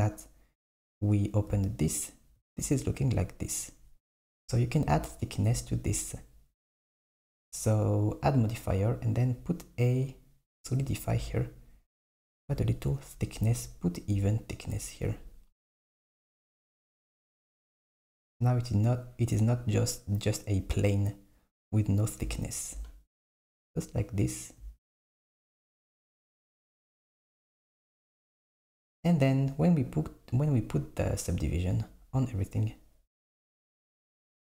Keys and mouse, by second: 10.8 click, 14.6 click, 26.2 Tab, 26.9 Tab, 31.4 click, 32.3 click, 33.4 click.